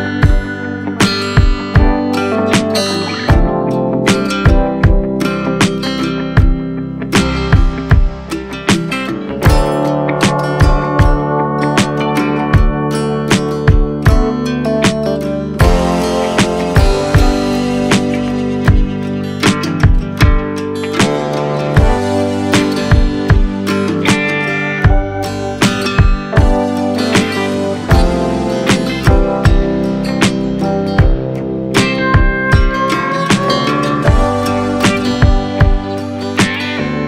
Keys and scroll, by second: 0.9 v, 1.5 super+], 3.9 b, 8.3 [, 10.8 [, 14.5 x, 15.0 [, 22.8 v, 25.2 super+l, 32.9 Return, 34.8 b.